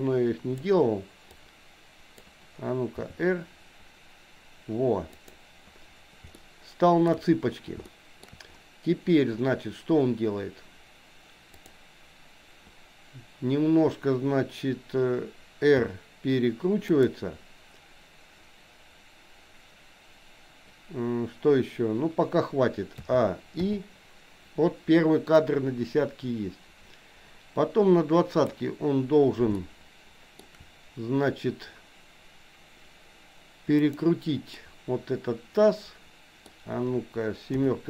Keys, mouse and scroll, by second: 1.4-2.4 drag, 3.0 r, 6.4 shift+middle click, 7.9 shift+middle click, 11.7 click, 15.9 r, 23.1 a, 23.6 i, 25.5-28.6 drag, 29.6 shift+middle click, 33.7 click, 34.6-36.5 middle drag, 37.6 KP_7.